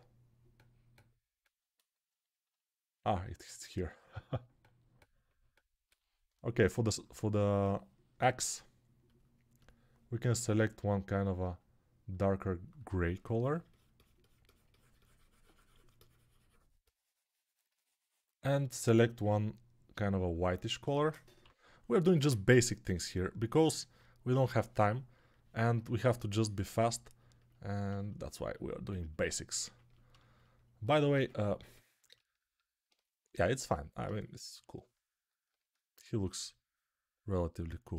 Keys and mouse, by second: 4.0-25.1 drag, 4.0-21.3 middle drag, 4.0-21.3 right drag, 21.3-22.1 [, 29.6-31.9 ctrl+alt+drag, 29.6-31.9 ctrl+alt+middle drag, 29.6-37.9 ctrl+alt+right drag, 31.0 ctrl+Tab.